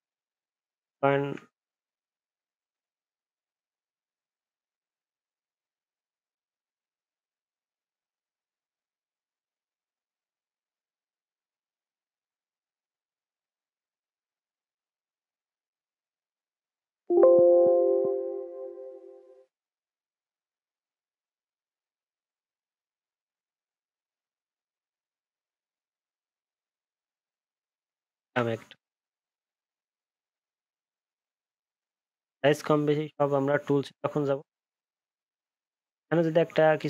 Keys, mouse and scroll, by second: 1.7 ctrl+z, 1.9 ctrl+z, 2.0 ctrl+z, 2.2 ctrl+z, 2.3 ctrl+z, 2.5 ctrl+z, 2.6 ctrl+z, 5.1 ctrl+z, 11.0 ctrl+z, 28.3 ctrl+z.